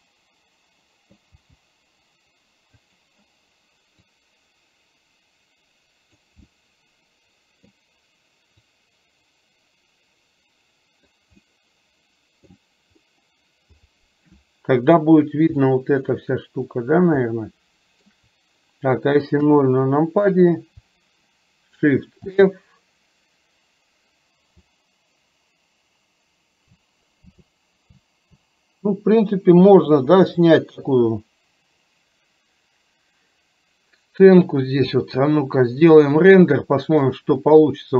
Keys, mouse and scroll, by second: 0.1-1.5 middle drag, 1.5 g, 4.1-6.4 drag, 6.5-7.8 middle drag, 8.8-11.3 drag, 11.5-12.6 middle drag, 15.8-16.3 shift+middle drag, 17.4-18.3 shift+middle drag, 19.5 KP_0, 22.3 shift+f, 37.1 click.